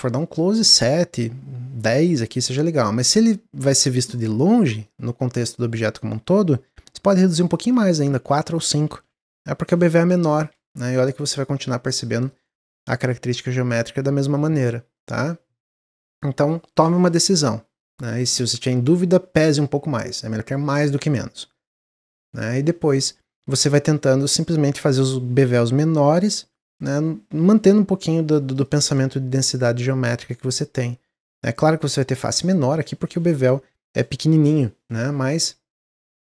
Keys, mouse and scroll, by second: 0.0 scroll up 1, 0.1-2.5 middle drag, 2.5-3.5 scroll down 10, 3.5-6.0 middle drag, 6.0-6.5 scroll up 7, 7.3-9.5 drag, 9.5 Tab, 10.3 click, 10.9 scroll down 3, 11.3 click, 11.5 right click, 12.1 click, 12.4 scroll down 1, 12.8 shift+middle click, 13.1 scroll down 1, 14.2 click, 14.5 click, 14.8-18.0 middle drag, 21.8 click, 28.5 click, 28.9 Tab, 29.2-29.9 scroll up 4, 29.9-31.8 middle drag, 31.8 click, 32.4 click, 36.1-36.2 middle drag.